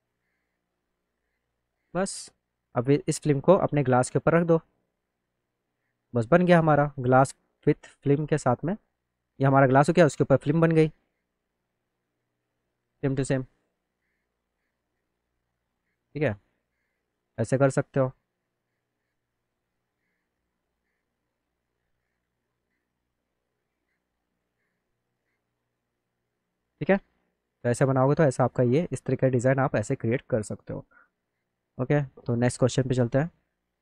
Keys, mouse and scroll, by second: 0.0 click, 0.6 alt+middle click, 1.0 middle click, 1.4 click, 2.4-3.8 drag, 4.4-5.7 drag, 6.0-7.0 alt+middle drag, 7.7 click, 8.1 middle click, 8.4 middle click, 8.9 click, 9.9 click, 10.5 click, 11.0 middle click, 11.2 alt+middle click, 14.4 click, 15.3 alt+middle click, 16.5 click, 17.0 alt+middle click, 17.9 alt+middle click, 18.6 middle click, 18.7 middle click, 19.1 alt+middle click, 20.4 middle click, 21.1 click, 22.3 click, 22.8 alt+middle click, 24.1 click, 24.5 click, 25.4 middle click, 28.0 middle click, 28.9 middle click, 30.2 middle click, 30.6 middle click, 32.8 click.